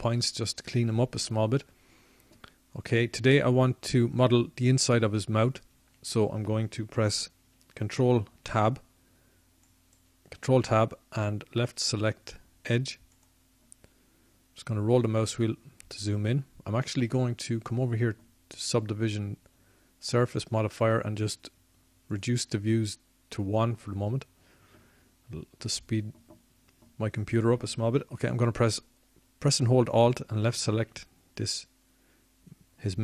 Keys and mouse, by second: 14.4 ctrl+Tab, 25.9-28.1 middle drag, 30.5 middle click.